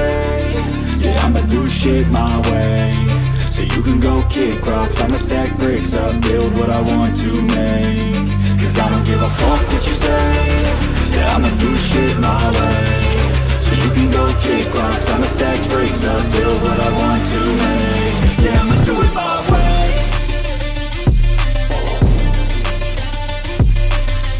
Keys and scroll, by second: 18.8 ctrl+j.